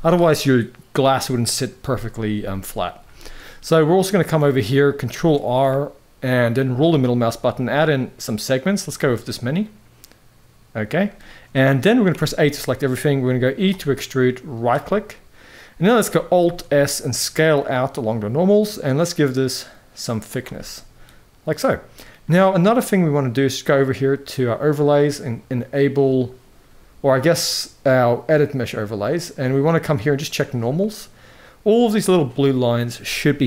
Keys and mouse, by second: 2.4 middle click, 2.9 shift+middle drag, 3.3-3.8 middle drag, 4.1 middle click, 4.9 ctrl+r, 8.9-10.4 middle drag, 11.0 shift+middle click, 11.8 a, 12.1 middle click, 13.0 middle click, 13.4 e, 14.5 middle click, 16.1 alt+s, 20.3-21.6 middle drag, 24.2-28.5 drag, 29.1-30.4 drag, 30.5 middle click, 31.8 middle click.